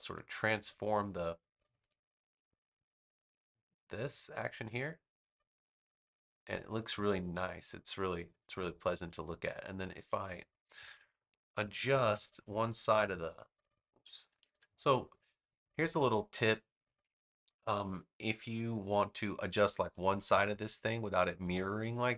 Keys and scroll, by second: 1.7 v, 14.3 super+z.